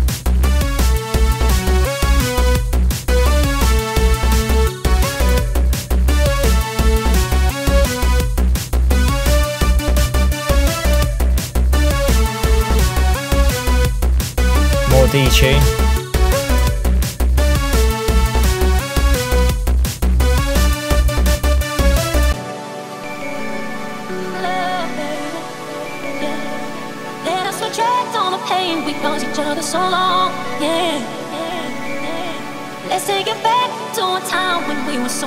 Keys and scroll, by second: 0.4 super+space.